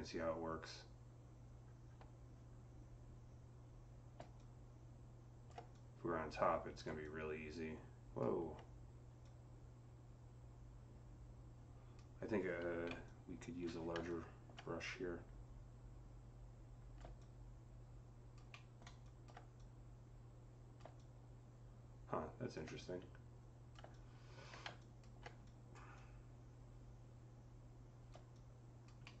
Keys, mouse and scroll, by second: 12.7-13.5 typing, 13.9-19.4 alt+drag, 18.3 alt+middle click, 19.4-25.8 alt+drag, 25.8-28.2 alt+drag, 28.2-29.2 drag, 28.9 alt+middle click.